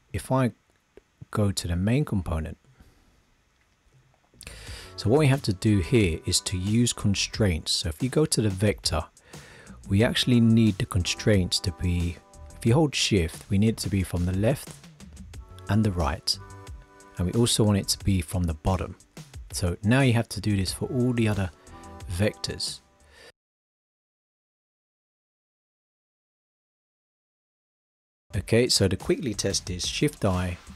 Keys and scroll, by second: 30.0 shift+i.